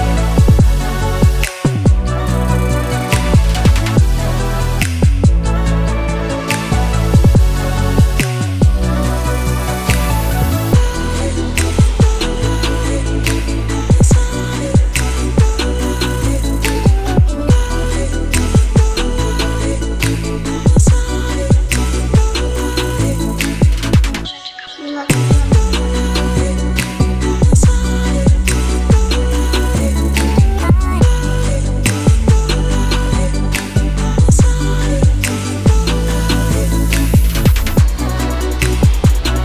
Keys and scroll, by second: 4.3-7.7 typing, 24.9-26.3 typing, 26.7 shift+Return.